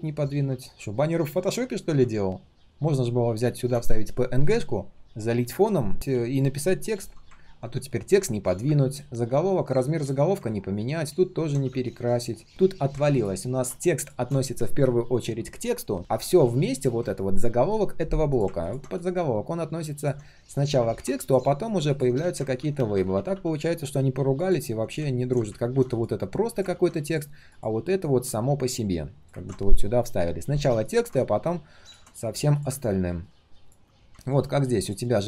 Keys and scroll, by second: 7.7 ctrl+shift+3, 8.4 ctrl+shift+3, 22.5 ctrl+z, 22.7 ctrl+z, 22.9 ctrl+z, 25.6 ctrl+z, 26.7 ctrl+z, 29.3 ctrl+z.